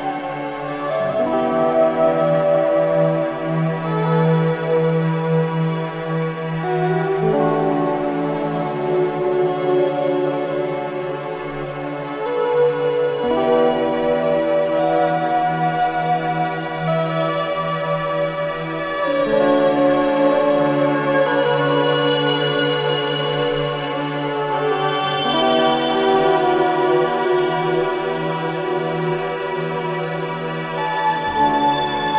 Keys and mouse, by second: 0.4 alt+shift+click, 1.3 f, 3.8 ctrl+b, 6.7 Tab, 13.4 s, 19.4 g, 22.1 click, 24.5 shift+a, 30.4 click, 31.2 s.